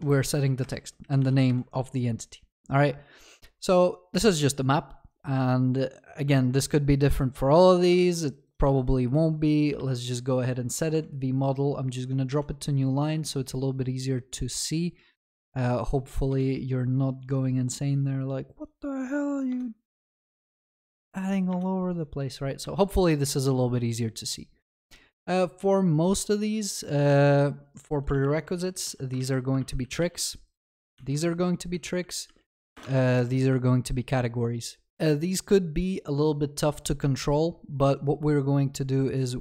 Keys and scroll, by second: 6.4 ctrl+c, 8.0 ctrl+v, 22.7 ctrl+s, 29.2 ctrl+s, 29.6 ctrl+w, 29.8 ctrl+c, 30.8 ctrl+v, 32.7 Return, 32.9 ctrl+s.